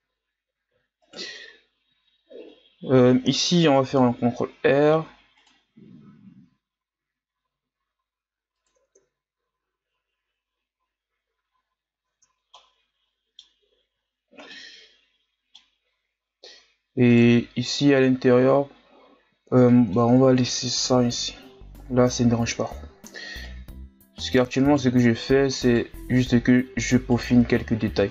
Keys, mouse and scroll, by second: 1.1 alt+right click, 2.4-3.9 ctrl+scroll up 2, 3.9 ctrl+r, 9.0 Tab, 9.6-10.8 scroll down 4, 10.8-11.5 scroll down 3, 11.5-12.1 scroll up 4, 12.1 Tab, 12.5-14.0 middle drag, 14.0-14.5 scroll up 2, 14.5-17.1 middle drag, 17.1 right click, 19.7 middle click, 20.0 Tab, 20.8 KP_1, 21.6-22.0 scroll down 2, 22.0-22.6 scroll up 7, 22.6 Tab, 23.4 right click, 25.2 right click, 26.1 right click, 27.3-28.1 scroll down 9.